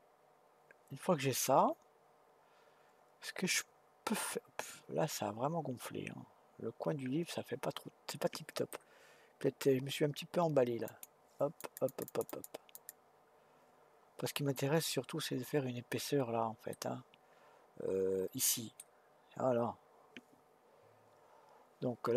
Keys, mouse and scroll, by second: 10.9-15.7 drag, 16.7-19.7 middle drag.